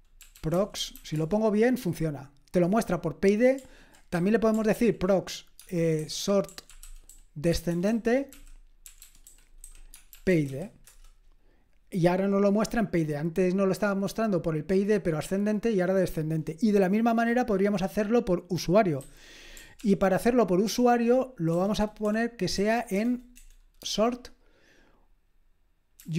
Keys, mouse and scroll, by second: 0.0-1.4 typing, 4.2 typing, 4.7 ctrl+p, 5.6-11.0 typing, 19.0 q, 19.8 ctrl+p, 21.5-23.8 typing, 26.0-26.1 typing.